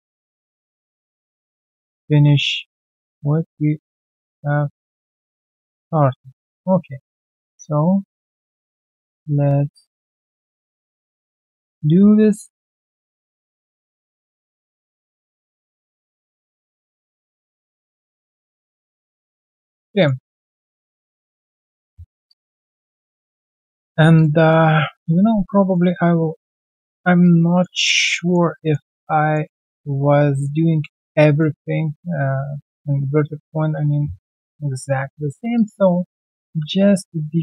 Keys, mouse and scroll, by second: 0.0 alt+right click, 0.6 alt+scroll down 1, 1.2 ctrl+click, 1.7-2.1 alt+scroll down 1, 2.3 alt+scroll down 3, 2.4 alt+right click, 3.9 double click, 4.7 shift+click, 5.1-5.7 shift+scroll down 1, 5.7 ctrl+click, 6.3 alt+right click, 7.0 r, 9.5 alt+right click, 9.7 alt+middle click, 10.0 alt+right click, 10.6 middle click, 12.0 alt+middle click, 14.1 double click, 14.3-14.6 scroll down 1, 14.9 ctrl+click, 15.6 alt+right click, 16.2 alt+w, 18.0 alt+click, 18.1 typing, 18.4 right click, 19.4-19.7 alt+scroll down 1, 19.7 alt+middle click, 20.4 typing, 20.8 alt+click, 21.3 alt+scroll down 1, 22.6 alt+middle click, 24.5 ctrl+1, 24.9 alt+middle click, 25.3 right click, 25.8-27.6 scroll down 1, 27.8 alt+right click, 28.1 alt+middle click, 28.9 alt+right click, 29.2 alt+middle click, 29.5 alt+right click, 29.7 alt+click, 30.3 alt+middle click, 30.7 alt+click, 30.9-31.3 alt+scroll down 1, 31.3 alt+middle click, 32.1 alt+middle click, 32.3-32.6 alt+scroll down 1, 32.7 alt+click, 32.9 alt+middle click, 34.6 right click, 35.5 alt+click, 36.8 alt+middle click.